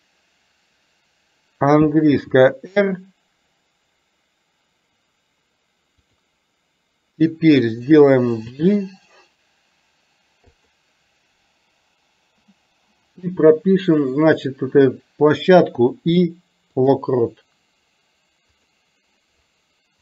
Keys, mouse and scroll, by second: 2.2 r, 8.7 g, 15.8 i, 18.7 click.